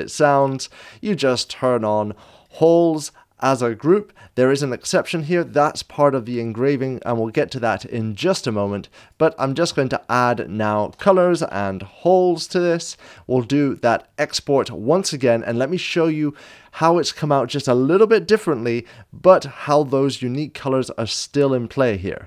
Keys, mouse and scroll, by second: 10.8-12.4 typing, 13.7 click, 13.7 s.